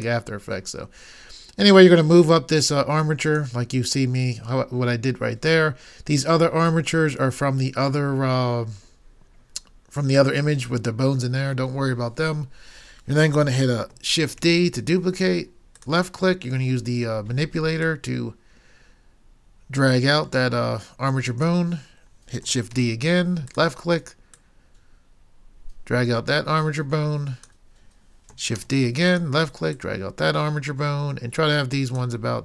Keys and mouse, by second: 2.8 click, 14.5 shift+d, 22.7 shift+d, 28.6 shift+d.